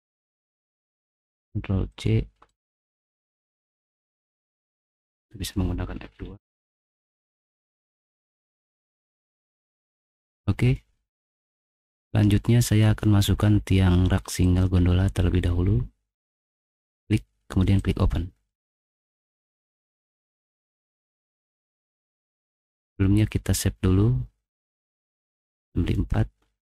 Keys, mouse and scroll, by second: 0.8 click, 1.3 ctrl+c, 1.9 click, 2.5 right click, 5.0 click, 6.7 F2, 7.8 middle click, 8.1 middle click, 8.5 ctrl+v, 8.6-10.1 typing, 10.1 click, 11.6 middle click, 14.4 click, 17.8 click, 18.8 middle click, 19.8 click, 21.7 click, 23.1-24.2 middle drag.